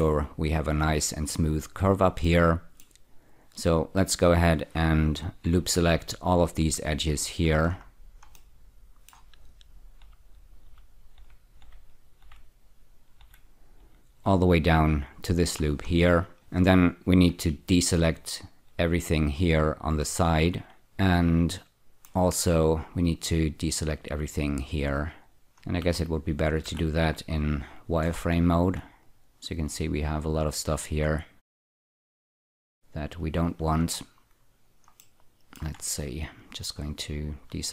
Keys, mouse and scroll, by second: 2.3 middle click, 4.1 click, 5.5 ä, 6.7 ä, 7.3 ä, 7.7-8.4 scroll up 4, 8.4 middle click, 10.0-15.4 typing, 15.7-16.3 scroll down 2, 16.3 middle click, 18.2-20.4 shift+drag, 20.8-22.2 middle drag, 23.5-25.4 shift+drag, 25.8 z, 26.6 z, 28.2-28.8 scroll down 3, 29.0 ctrl+click, 30.2 ctrl+click, 32.1 ctrl+click, 33.2 ctrl+click, 34.0-35.0 scroll up 1, 35.0 middle click, 36.4 ctrl+click.